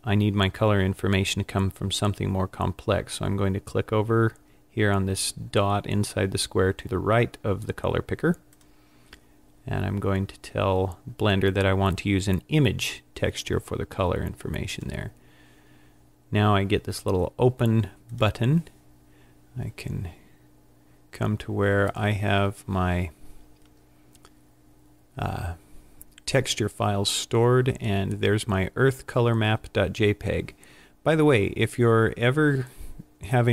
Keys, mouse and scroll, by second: 8.6 click, 18.1 click.